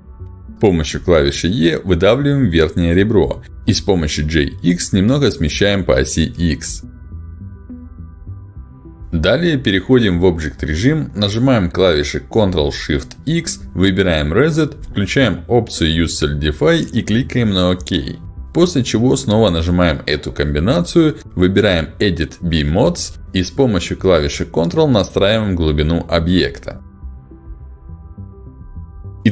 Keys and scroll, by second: 0.3 Escape, 0.5 e, 3.8 g, 4.2 x, 11.3 ctrl+shift+x, 21.9 ctrl+shift+x, 28.9 space.